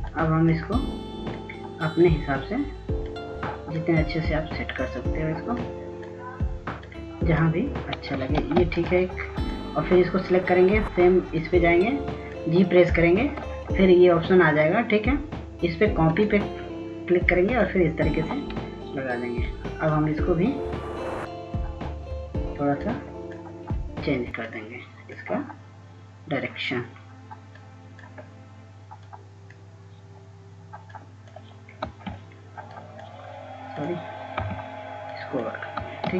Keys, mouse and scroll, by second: 0.7-9.8 drag, 10.0 ctrl+space, 10.4-33.7 drag, 34.6 click.